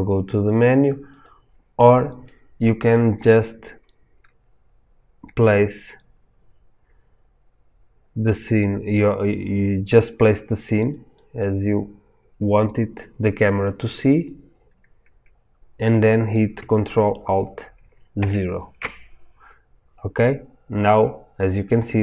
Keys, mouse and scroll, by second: 1.2 click, 2.2-22.0 middle drag, 18.1 ctrl+alt+KP_0, 20.7-21.7 scroll up 2, 21.7-22.0 scroll down 2.